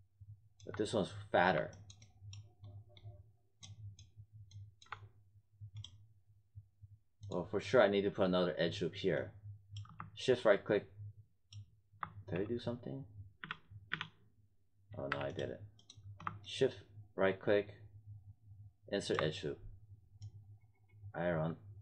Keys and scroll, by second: 13.4 z.